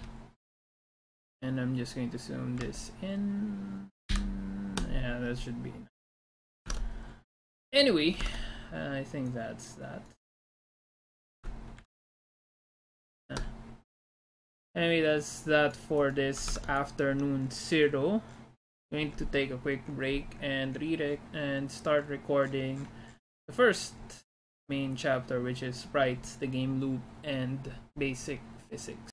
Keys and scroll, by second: 4.2 ctrl+-, 6.7 alt+Tab, 8.2 alt+Tab, 13.0 ctrl+-.